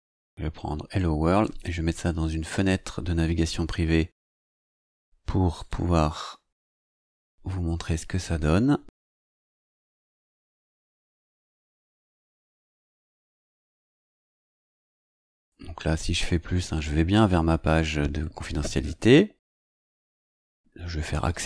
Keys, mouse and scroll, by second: 1.3 click, 4.5 right click, 5.5 click, 7.0 click, 8.8 ctrl+v, 10.1 Return, 13.9-14.2 scroll down 2, 20.6 scroll down 2, 21.0 click.